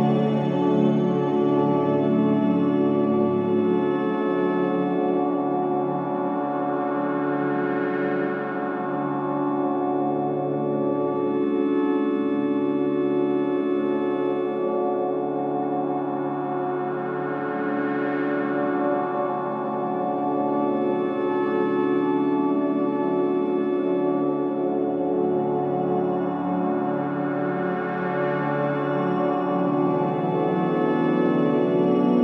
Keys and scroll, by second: 1.1 c, 4.0 3, 4.9 KP_2, 6.5 ctrl+3, 8.3 3, 10.5 3, 11.2 3, 12.1 3, 13.3 ctrl+3, 14.0 ctrl+3, 14.8 ctrl+3, 19.6 alt+KP_3, 24.4 ctrl+KP_0, 25.0 b, 26.1-27.6 typing, 32.1 ctrl+KP_0.